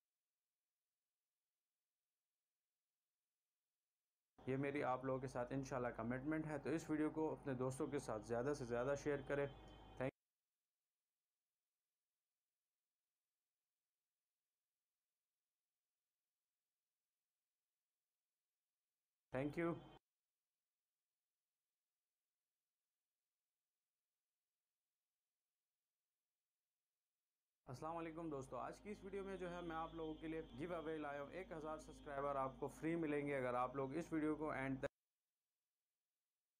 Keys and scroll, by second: 2.0 v, 4.4 shift+Delete, 4.7 space, 10.4 space, 11.2 c, 17.6 v, 19.2 shift+Delete, 19.7 space, 21.2 c, 25.3 v, 26.7 shift+Delete, 27.7 space, 35.2 space.